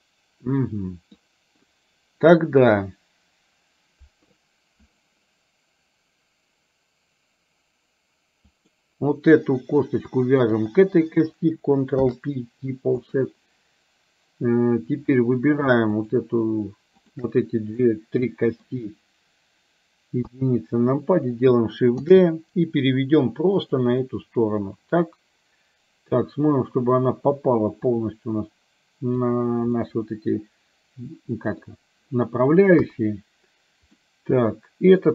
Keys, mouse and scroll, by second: 8.4 click, 10.4 shift+click, 11.9 ctrl+p, 15.0 click, 17.2 shift+click, 17.9 middle click, 20.3 KP_1, 22.1 shift+d, 24.2-26.9 middle drag, 27.9-29.3 drag, 30.0-31.7 middle drag, 32.8 KP_1, 33.9-35.1 middle drag.